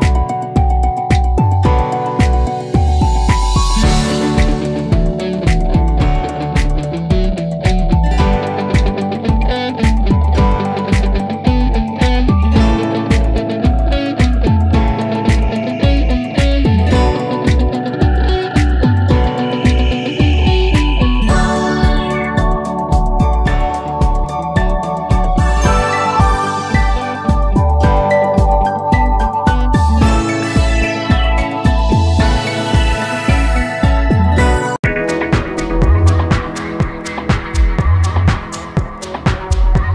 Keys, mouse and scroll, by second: 4.1 ctrl+t, 5.0-8.0 shift+drag, 8.0 Return, 9.9 click, 16.1 click, 20.0 ctrl+t, 20.4 ctrl+t, 21.2 click, 22.1-24.3 shift+drag, 24.3 Return, 25.7-30.4 drag.